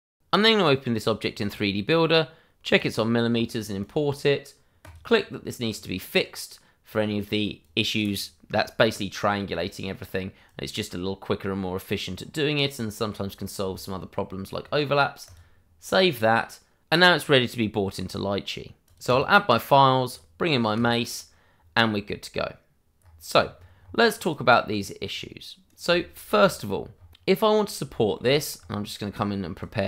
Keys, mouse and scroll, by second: 0.4 click, 0.6 double click, 2.7 click, 3.2 scroll up 1, 3.7 click, 5.6 scroll up 1, 6.1 click, 10.4 click, 12.1-12.7 scroll up 1, 12.7 click, 13.7 shift+middle click, 15.2 click, 19.4 click, 22.9-24.2 scroll up 1, 24.2 click, 24.8 double click, 25.1 right click, 25.9 shift+middle click, 26.3-27.1 scroll up 1, 27.8 shift+middle click, 28.2-29.5 scroll up 1, 29.5 click.